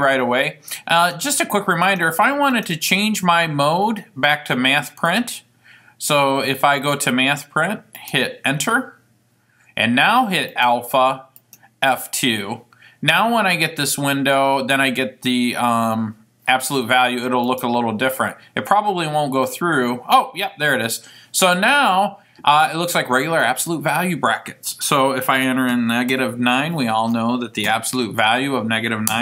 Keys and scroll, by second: 5.2 Up, 8.1 Return, 17.7 Return, 25.9 -, 26.2 9, 27.8 Right, 28.3 Right.